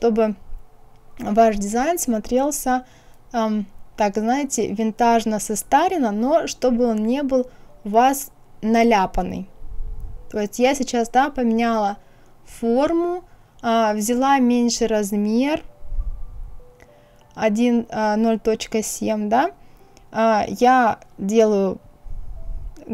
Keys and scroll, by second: 10.6 KP_0, 11.0 KP_Decimal, 11.4 KP_7, 12.1 Return.